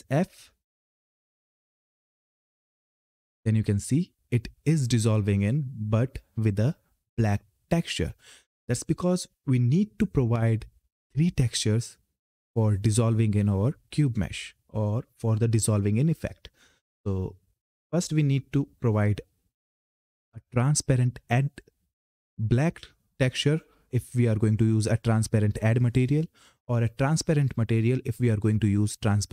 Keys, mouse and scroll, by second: 1.2 f, 17.7 click, 21.4 click.